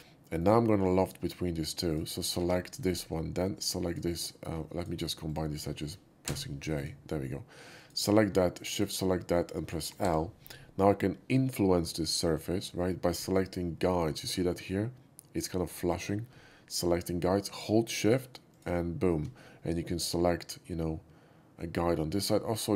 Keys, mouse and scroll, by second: 0.9 click, 1.8 click, 2.3 2, 2.7 click, 3.8 shift+click, 4.7 shift+click, 5.2 shift+click, 6.2 j, 6.7 click, 7.7 click, 8.6 shift+click, 10.0 l, 18.5 shift+click, 19.6-22.2 shift+middle drag.